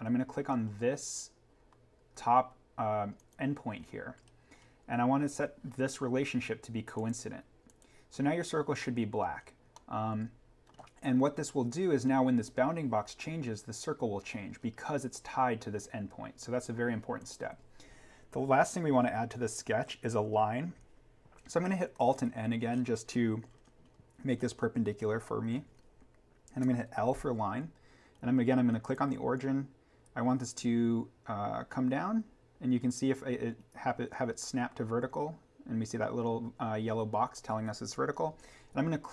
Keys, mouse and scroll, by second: 0.6-1.7 scroll down 1, 4.2-6.0 scroll up 1, 6.9 click, 9.7 middle click, 11.0-12.7 scroll up 1, 14.3-14.8 scroll down 1, 17.1 click, 21.9 click, 22.1 alt+n, 22.7-23.4 scroll up 1.